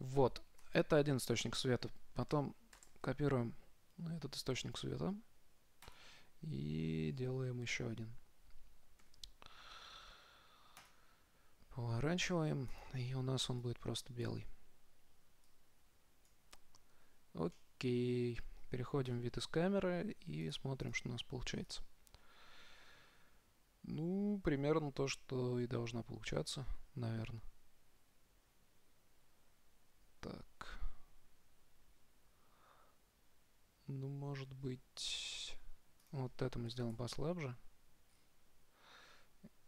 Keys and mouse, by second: 0.8 KP_7, 3.0 shift+d, 9.2 r, 12.9-14.9 drag, 17.7 middle click, 19.4 KP_0, 19.5 middle click, 20.7 click, 21.6 click, 22.2 click, 34.9-36.3 middle drag, 36.3-38.2 drag, 38.3-39.6 middle drag.